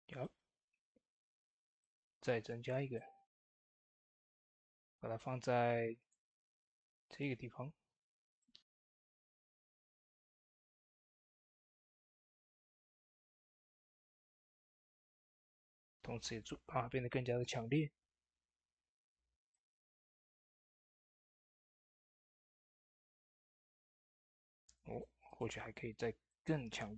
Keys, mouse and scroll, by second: 0.5 middle click, 1.6 click, 2.6 scroll down 1, 2.8 shift+middle click, 3.8-10.5 drag, 4.7 typing, 8.3 typing, 11.6 click, 11.6 typing, 11.6 scroll down 1, 12.9 click, 19.3 click, 19.3 typing, 19.4-26.9 drag, 23.5 typing.